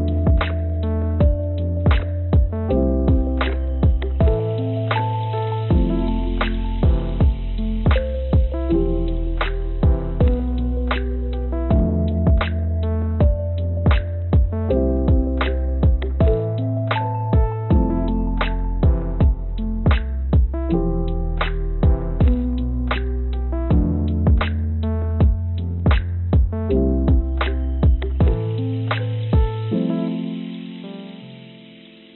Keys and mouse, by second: 1.1 shift+d, 3.7 g, 6.2 g, 10.2 click, 10.8 click, 13.0 click, 14.2 s, 14.6 click, 14.9 s, 16.7 click, 18.6 g, 20.7 g, 23.1 g, 26.7 click, 27.7 click, 28.4 click, 30.2 click, 31.0 g.